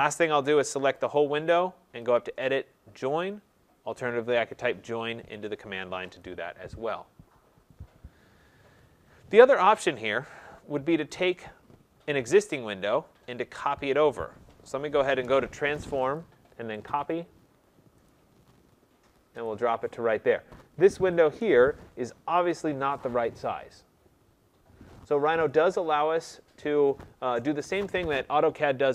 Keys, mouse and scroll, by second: 1.0 click, 2.2 click, 3.2 click, 6.2 click, 8.2-9.3 scroll, 9.3-10.5 scroll, 11.2 click, 15.5-16.2 drag, 16.9 click, 18.1 click, 19.5 click, 21.3 Return, 22.5 click, 25.3 middle click, 25.5 middle click.